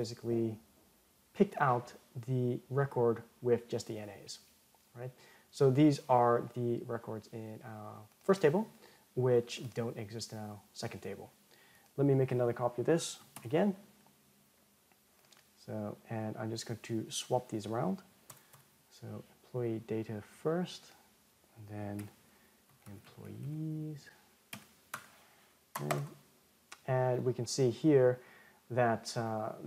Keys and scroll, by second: 13.1 alt+shift+Down, 26.1 ctrl+Return.